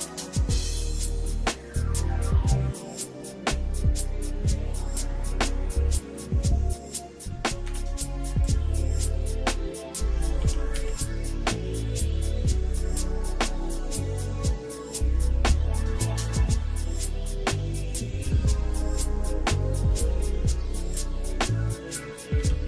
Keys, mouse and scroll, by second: 1.0 ctrl+click, 2.2 shift+middle click, 3.8 shift+middle click, 7.8 e, 10.4 s, 22.5 s.